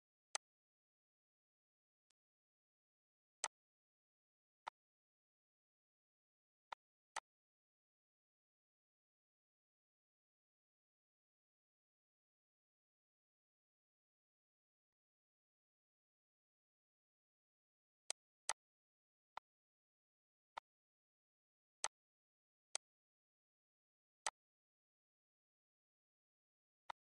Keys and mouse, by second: 0.9 click, 1.7 click, 2.9 click, 5.0 click, 5.9 click, 14.8 click, 17.8 click, 19.5 click, 20.4 click, 21.0 click, 21.9 click, 22.9 click, 23.5 click, 24.1 click, 25.4 click.